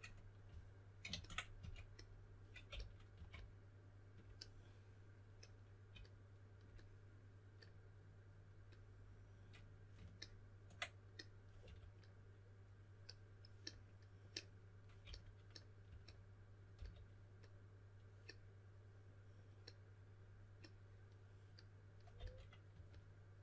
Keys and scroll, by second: 0.0-0.4 typing, 1.5-3.6 typing, 11.6 2, 14.8-16.7 typing, 22.1-22.7 typing.